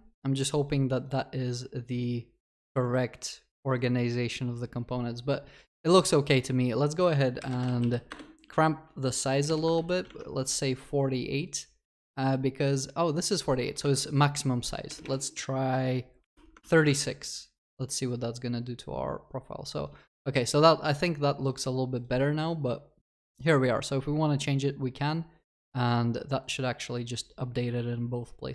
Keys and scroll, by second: 8.1 Return, 16.6 ctrl+s.